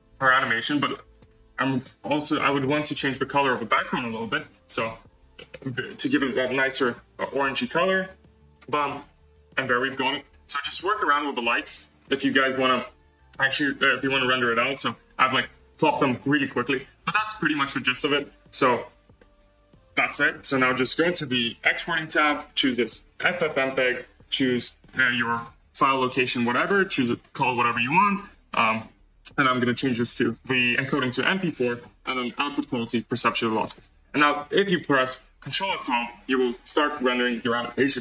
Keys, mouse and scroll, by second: 1.0 click, 1.5 click, 2.6-3.0 drag, 3.3-4.0 scroll down 1, 4.0 KP_0, 5.2 z, 6.3-7.1 drag, 8.9-10.0 scroll up 1, 10.0 scroll up 1, 10.1 click, 10.9 g, 12.2-13.4 scroll down 1, 13.4-13.8 scroll down 1, 13.8 click, 14.5 g, 16.0-16.6 scroll up 2, 16.0 middle click, 16.6-17.5 scroll down 1, 21.3 click, 22.2-31.1 drag, 31.1-32.1 scroll down 2, 32.1-33.6 drag, 33.6 space.